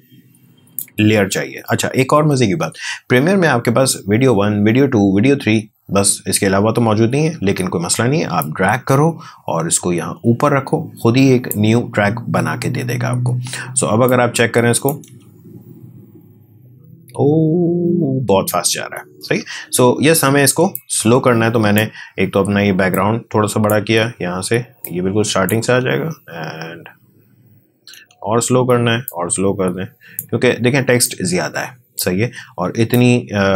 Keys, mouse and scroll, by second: 15.4 space, 19.2 space, 20.7-25.6 drag, 25.6 space, 27.9 space, 29.0-33.5 drag.